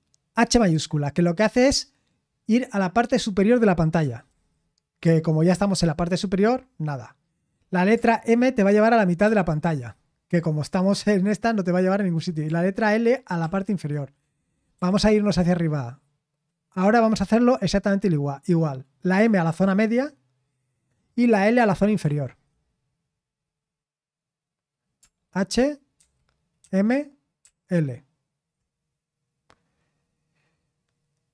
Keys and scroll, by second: 4.2 shift+h, 9.2 shift+m, 13.4 typing, 14.7 typing, 19.5 typing, 22.0 typing, 25.9-27.4 typing.